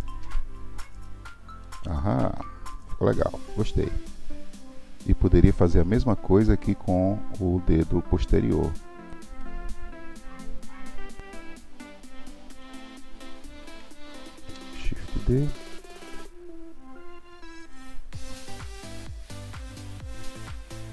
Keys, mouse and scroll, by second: 1.0-1.9 middle drag, 1.9-2.4 scroll down 6, 2.4-5.0 middle drag, 5.6-8.9 scroll up 1, 9.1 Tab, 9.4-11.2 middle drag, 11.2 l, 12.5 l, 16.1 shift+d.